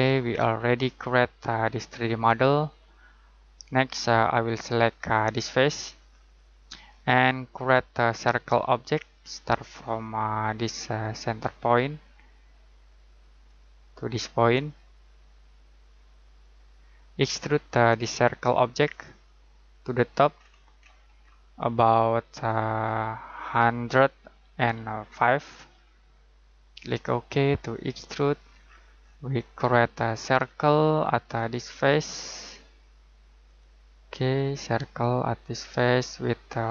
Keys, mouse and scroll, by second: 0.3 middle click, 3.9-5.7 scroll down 1, 5.7 click, 13.4 click, 16.4 click, 20.1 scroll down 1, 20.3-21.1 scroll up 1, 23.4 typing, 24.5 typing, 26.1 typing, 26.7 click, 28.4 scroll down 1, 28.6-29.6 scroll up 1, 29.6-31.1 scroll down 1, 31.2 click.